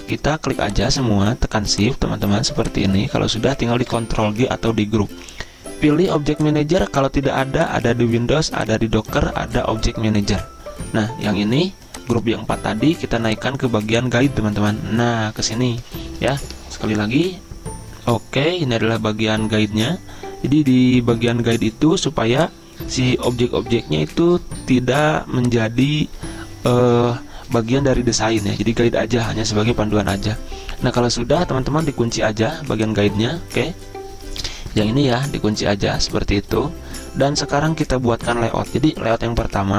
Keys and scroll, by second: 3.8 ctrl+g, 37.4 z.